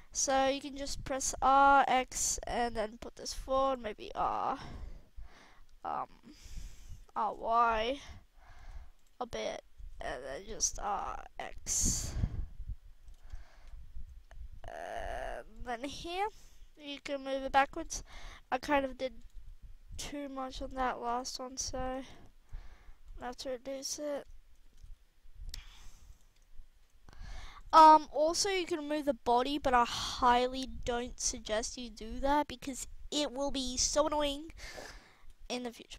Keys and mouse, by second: 1.7-2.1 drag, 2.1 r, 3.7 r, 6.9 r, 8.5 g, 9.1 r, 13.3-15.5 middle drag, 15.5 drag, 15.8-16.2 middle drag, 16.8 middle click, 17.3 g, 18.1 r, 19.2-19.7 drag, 19.3 r, 21.5 r, 22.5-23.6 drag, 24.7 r, 28.1 KP_1, 29.2 r, 34.7-35.9 right drag, 35.1 r.